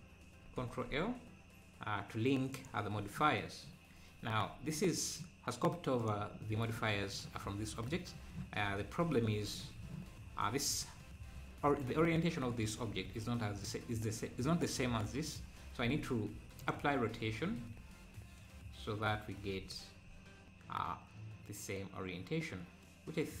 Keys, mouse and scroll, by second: 0.6 ctrl+l, 3.3-3.6 scroll down 5, 3.6 `, 4.2 `, 6.0-7.9 drag, 9.6-10.0 scroll up 1, 13.6-15.8 drag, 15.8 ctrl+a, 17.6 scroll down 1, 19.7-20.0 scroll up 4.